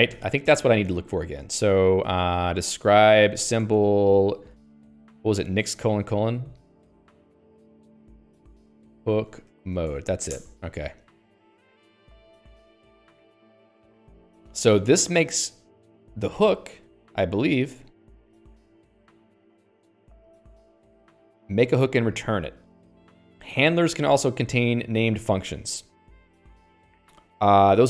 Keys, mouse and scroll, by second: 0.6 Escape, 1.5 Escape, 2.2 j, 2.6 alt+x, 3.7 ctrl+j, 4.1 Return, 6.5 Return, 6.6-10.7 typing, 10.9 Return, 16.9 click, 17.5 click, 19.0 click, 24.9 click, 25.4 click.